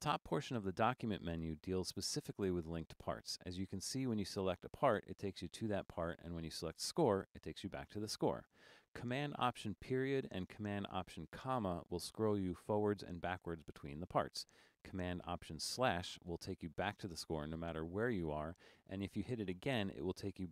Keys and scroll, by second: 0.0 8, 10.8 alt+super+., 11.5 alt+super+., 12.6 alt+super+,, 13.5 alt+super+., 16.0 alt+super+/, 20.0 alt+super+/.